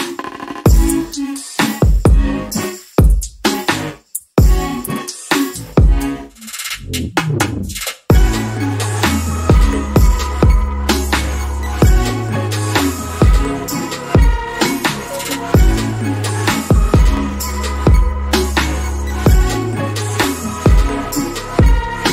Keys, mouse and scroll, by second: 0.3 alt+click, 0.7-1.0 alt+scroll up 2, 1.2 middle click, 2.0-2.7 scroll up 1, 3.8 click, 10.5 alt+middle click, 10.8 alt+click, 13.5 alt+middle click, 14.0-15.2 scroll down 1, 15.5 alt+middle click, 20.1-20.7 scroll down 1, 21.4 middle click, 21.8 scroll down 1.